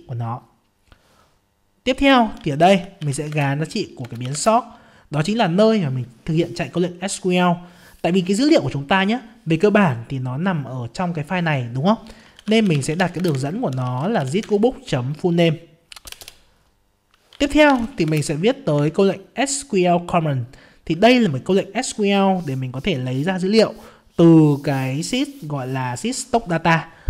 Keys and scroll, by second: 3.3 ctrl+space, 13.2 ctrl+space, 18.0 ctrl+space, 19.0 ctrl+space.